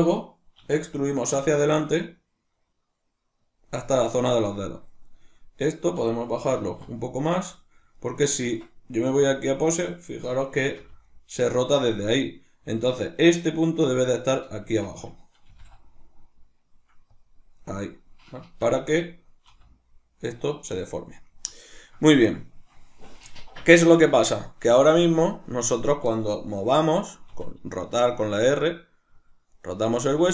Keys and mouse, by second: 3.6 click, 4.9 right click, 5.6 right click, 6.6 g, 8.1 right click, 8.5 Tab, 9.7 right click, 10.8 r, 11.7 right click, 14.7 Tab, 15.5 g, 17.3 click, 18.4 Tab, 20.9 right click, 21.1-25.6 ctrl+middle drag, 25.6 right click, 27.3 r, 29.6 right click, 29.9 r.